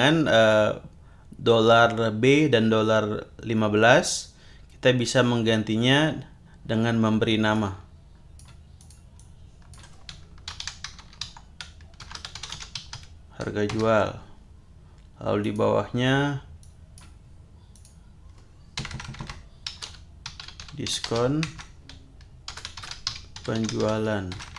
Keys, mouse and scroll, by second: 7.5 click, 8.8 click, 9.2-9.9 drag, 10.2-13.4 typing, 13.7 Return, 15.4 click, 16.6 click, 17.7 click, 18.9-24.5 typing.